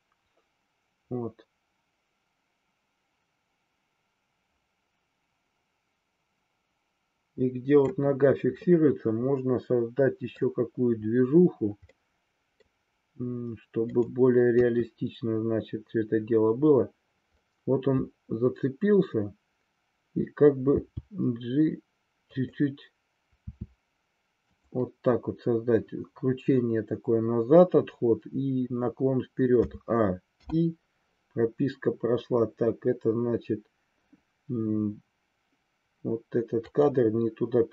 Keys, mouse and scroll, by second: 8.6-10.5 middle drag, 12.0-12.7 middle drag, 15.0 KP_3, 20.7 g, 22.4 click, 23.6 r, 24.5 click, 29.6 a, 30.5 i, 36.6 click.